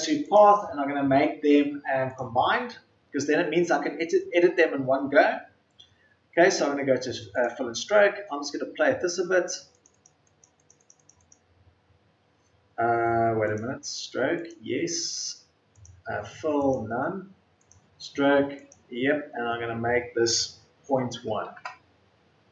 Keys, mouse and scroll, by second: 20.7 KP_Decimal, 21.1 KP_1.